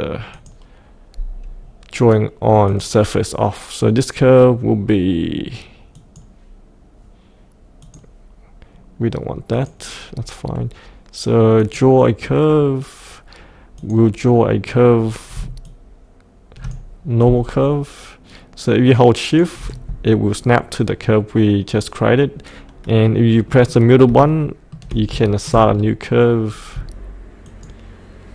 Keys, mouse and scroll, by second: 15.6-17.2 shift+drag, 18.9 shift+click, 23.4 middle click, 24.3 shift+middle click, 25.2 shift+middle click, 25.7-26.7 scroll down 1, 27.5 shift+click.